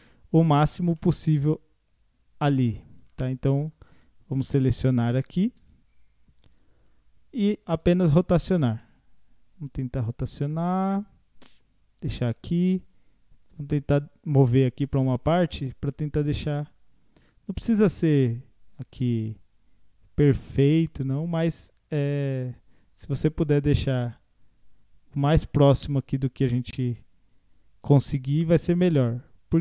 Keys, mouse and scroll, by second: 0.4 scroll up 1, 1.0-1.5 shift+middle drag, 1.5-1.8 scroll up 4, 3.0 click, 3.6 click, 4.3 scroll down 5, 5.1 a, 5.6 a, 6.6 click, 6.9 scroll up 4, 8.9 r, 12.8 g.